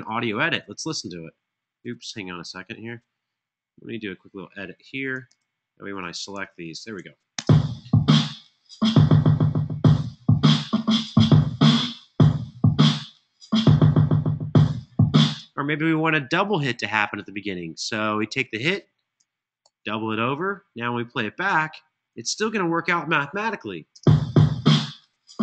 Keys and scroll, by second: 5.0 super+e, 7.2 super+e, 7.2 space, 15.0 space, 19.4 super+d, 23.6 space.